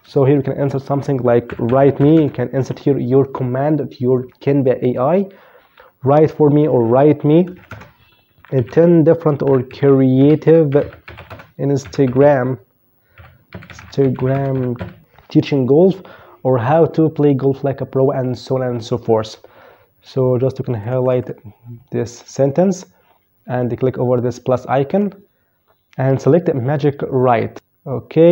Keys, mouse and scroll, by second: 0.2-1.6 typing, 6.3-15.1 typing, 19.9 click, 24.1 click, 27.0 click.